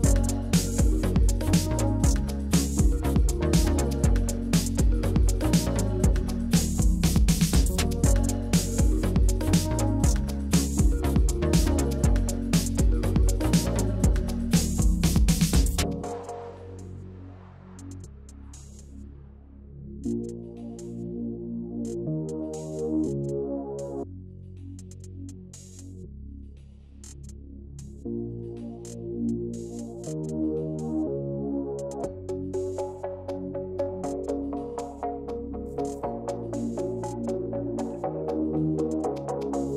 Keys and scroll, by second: 1.1-1.9 typing, 3.9 Up, 4.0 Up, 4.4 Up, 6.8 Left, 6.9 Left, 6.9 Left, 7.1 Left, 8.1 Right, 9.9 ctrl+c, 10.6 ctrl+v, 16.9 Up, 17.4 Down, 17.5 Down, 20.6 Up, 20.7 Up, 21.2 Down, 24.1 ctrl+c, 24.5 ctrl+v, 37.0-38.6 typing.